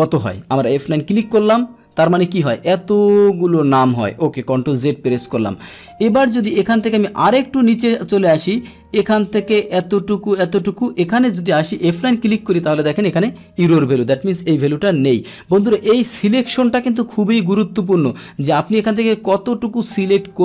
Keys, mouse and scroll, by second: 1.1 F9, 4.7 ctrl+t, 6.5 click, 9.2-12.0 drag, 12.0 F9, 15.1 ctrl+z, 17.6 Escape.